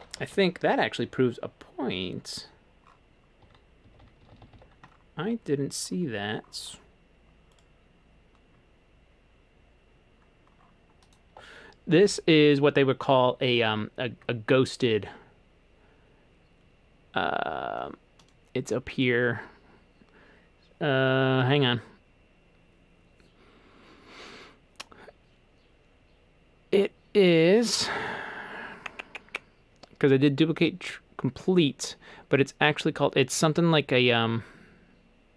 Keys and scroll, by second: 3.4-4.2 typing, 6.6-7.3 typing.